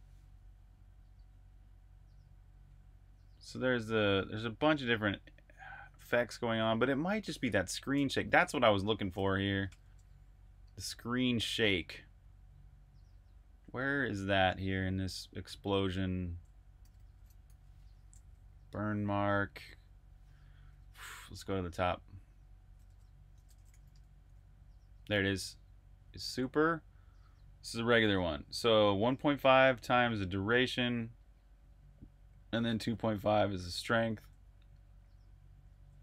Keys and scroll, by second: 8.1 super+`, 9.2 v, 9.5 Return, 13.4-14.9 typing, 16.4-18.6 typing, 19.8-22.2 typing, 25.7-26.1 typing, 33.9 super+`, 35.9-36.0 typing.